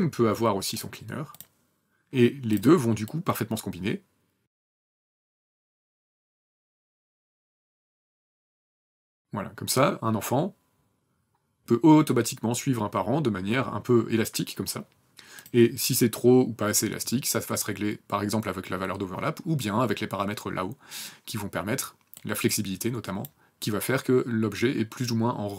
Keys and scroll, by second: 4.4 KP_0.